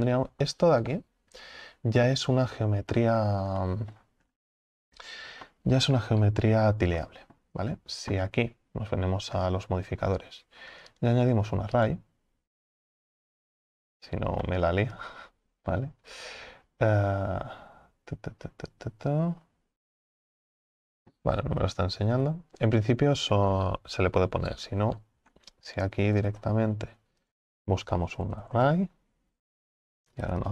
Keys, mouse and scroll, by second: 2.5-4.3 scroll up 3, 4.3 scroll up 1, 4.4-5.5 scroll down 6, 5.5-6.3 scroll down 1, 6.3-7.0 scroll up 4, 7.0-9.3 middle drag, 9.3-9.7 scroll down 2, 9.7-10.9 scroll up 2, 11.9-13.9 drag, 13.9-14.4 scroll down 3, 14.4-18.9 middle drag, 18.9-21.5 drag, 21.5 ctrl+z, 22.2 ctrl+z, 24.1 scroll down 6, 24.3-30.5 middle drag.